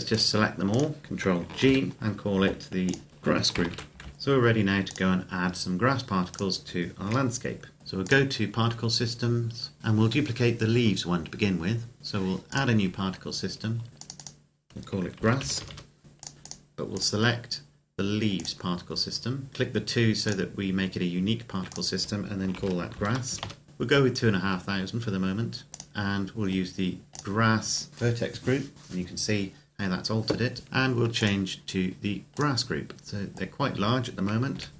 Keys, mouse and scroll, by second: 1.4 ctrl+g, 2.6 click, 3.1-3.9 typing, 4.1 click, 4.6 click, 5.2-6.1 scroll down 1, 6.1 right click, 6.8 KP_Decimal, 7.8 middle click, 7.8 click, 12.2 click, 14.9-15.4 typing, 16.0 Return, 17.1 click, 20.0 click, 22.3-23.2 typing, 23.6 Return, 24.2-25.7 scroll down 1, 25.7 click, 30.6-31.0 scroll up 1, 31.0 click, 34.3 KP_0.